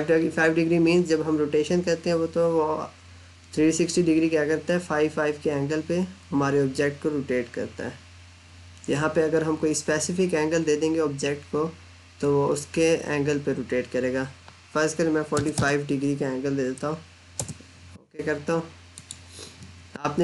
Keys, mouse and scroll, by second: 15.2 4, 17.0 Return, 18.8 click.